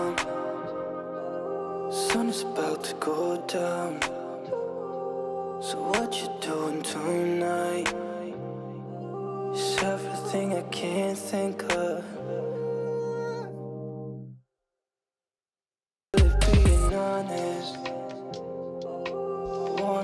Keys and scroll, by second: 16.1 ctrl+space.